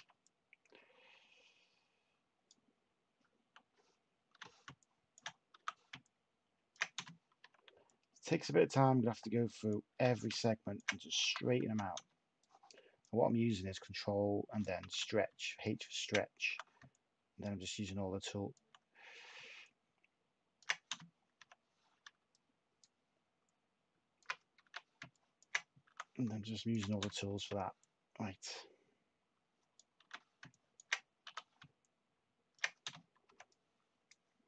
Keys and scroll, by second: 4.3 h, 5.5 t, 6.9 /, 9.9 h, 11.2 t, 11.9 t, 14.8 h, 16.4 t, 21.4 /, 24.6 h, 25.8 t, 27.3 /, 30.0 h, 31.2 t, 32.8 /.